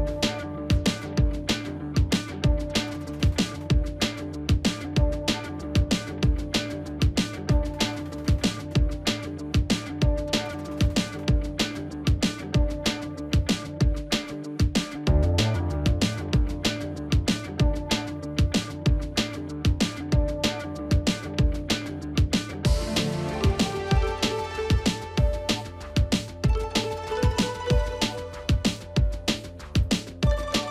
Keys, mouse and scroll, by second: 13.8 right click, 16.1 shift+click, 19.5 ctrl+a, 21.9 ctrl+a, 22.2 ctrl+d, 28.2 double click.